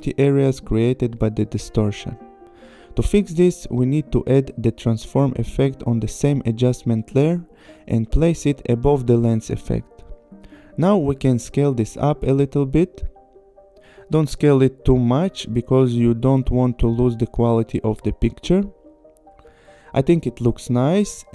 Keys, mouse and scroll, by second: 3.0 click, 5.2 click, 5.9-6.9 typing, 8.3 click, 12.7 click, 13.4 shift+Up, 16.0 click, 16.8 click, 17.7 click, 20.1 click.